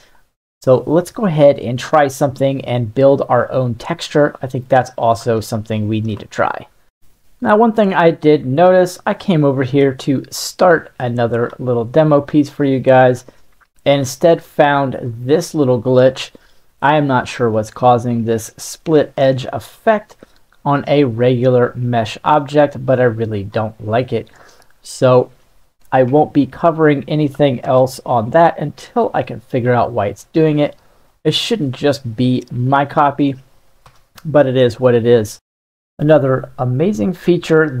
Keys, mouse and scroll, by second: 2.6-4.6 middle drag, 4.8 shift+middle click, 5.4-6.0 ctrl+middle drag, 8.0-8.8 middle drag, 9.5 click, 11.9 middle click, 13.2 click, 15.1 ctrl+middle click, 17.8-18.8 ctrl+middle drag, 19.9-23.5 shift+drag, 24.2-24.7 middle drag, 25.0 right click, 26.3 Delete, 27.6 shift+s, 29.9-30.9 right drag, 33.0 shift+middle click, 33.8 shift+a, 36.0-37.8 middle drag.